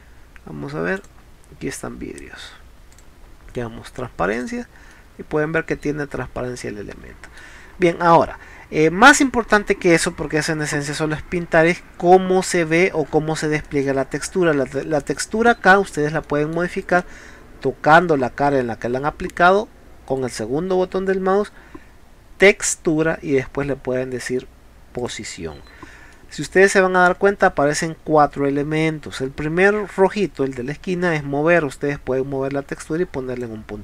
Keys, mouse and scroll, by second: 1.0 click, 2.9 click, 4.3 click, 4.9 middle click, 8.0 middle click, 10.1 scroll down 2, 10.8 scroll up 2, 11.4 middle click, 12.4 scroll down 2, 12.7-13.2 scroll up 4, 13.7 middle click, 15.2 middle click, 16.2 space, 16.3 middle click, 16.9 click, 20.1-21.5 right drag, 25.0 click, 26.2 middle click, 27.0-27.5 scroll up 3, 30.2-31.8 drag.